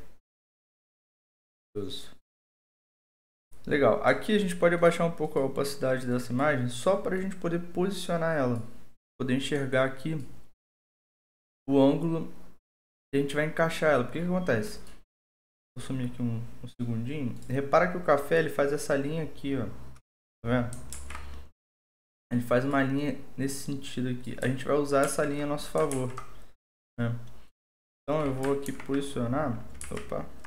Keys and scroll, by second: 20.9 ctrl+z, 25.0 ctrl+z, 25.9 ctrl+z, 28.7 ctrl+5, 29.8 ctrl+z.